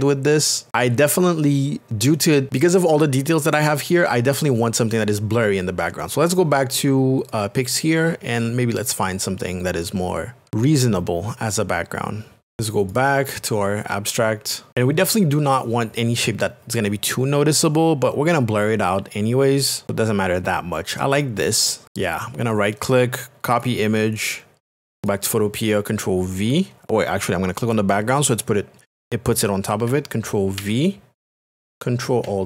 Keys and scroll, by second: 30.6 ctrl+v.